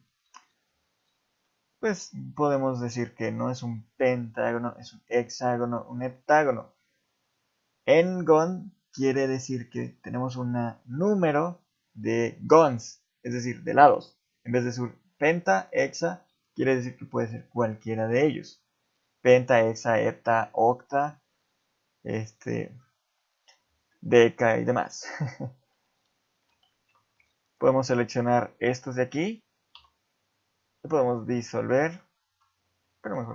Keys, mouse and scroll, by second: 1.4 shift+middle click, 23.9 shift+middle click, 24.6 shift+middle click, 25.0-25.3 scroll down 3, 25.3 scroll up 2, 25.5 ctrl+z, 26.0 ctrl+z, 26.5 ctrl+z, 27.5 shift+click, 27.7 shift+click, 28.0 shift+click, 28.8 shift+click, 29.7 x, 31.8 ctrl+z, 33.1 x.